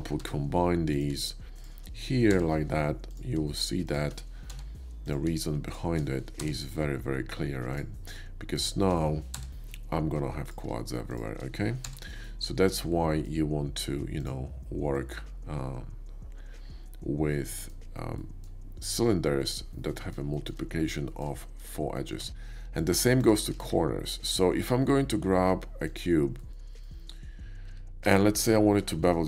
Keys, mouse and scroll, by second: 0.0 j, 0.8 click, 1.6 shift+click, 2.2 j, 3.0 click, 3.8 shift+click, 4.3 j, 5.0 click, 5.6 shift+click, 6.4 j, 7.6 click, 8.5 shift+click, 9.4 j, 10.3 click, 11.0 shift+click, 11.8 j, 12.1-13.1 middle drag, 14.0 click, 15.0-17.6 middle drag, 18.2 middle click, 19.8 middle click, 20.3 shift+middle click, 21.0 shift+middle click, 21.4 shift+middle click, 22.1 Tab, 22.6 x, 22.7 Tab, 22.8 click, 23.1 click, 23.6 shift+a, 25.7 click, 26.4 middle click, 26.8 middle click, 27.8 Tab, 28.1 Tab, 28.4 click, 28.9 middle click.